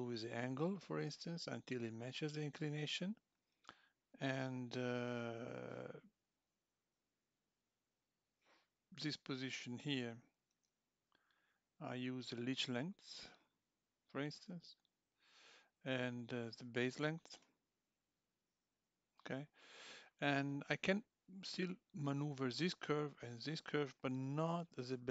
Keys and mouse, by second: 12.4 click, 17.4 click.